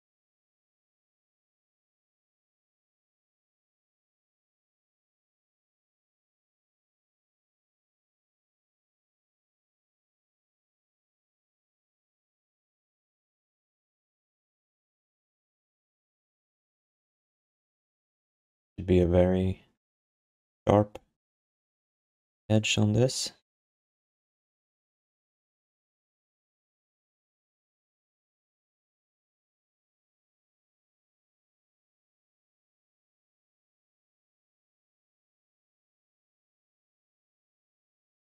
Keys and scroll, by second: 1.4 z, 1.8 z, 3.3 q, 4.0 alt+d, 5.9 w, 6.6 x, 7.4 r, 8.7 w, 9.0 x, 9.9 q, 11.1 alt+d, 28.4 q, 32.7 g, 34.0 alt+shift+d.